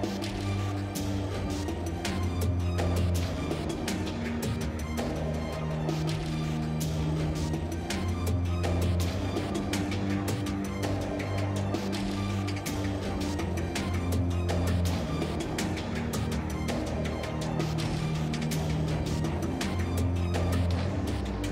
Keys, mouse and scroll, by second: 9.4 ctrl+x, 13.5 space, 21.1 x.